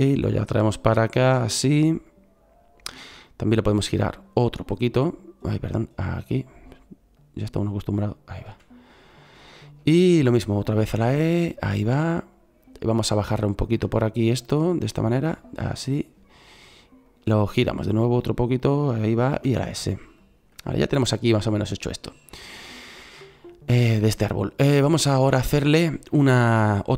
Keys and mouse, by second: 3.9 middle click, 8.4 s, 10.7 e, 19.3 s, 24.1 middle click.